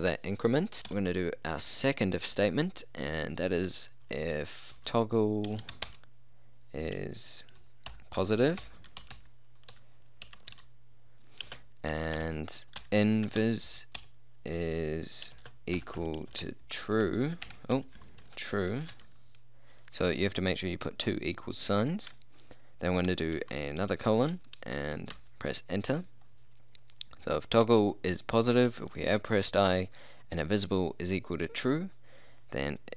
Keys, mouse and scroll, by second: 0.8 i, 1.0 f, 4.7-5.9 typing, 8.0-14.1 typing, 15.4-19.0 typing, 23.4 shift+;, 25.2 Return.